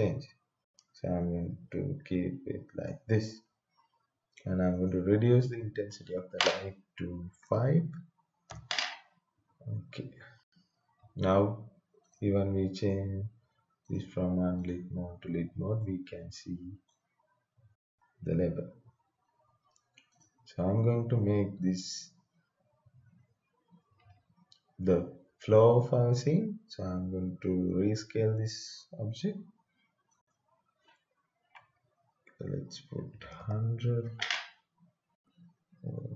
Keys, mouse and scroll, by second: 4.7 click, 7.4 5, 8.5 Return, 10.0-10.5 scroll down 1, 10.5-12.0 scroll up 1, 12.0 click, 15.7-19.4 right drag, 20.1 click, 22.6-23.1 scroll down 1, 23.1 scroll down 1, 30.1 click, 32.7-33.8 typing.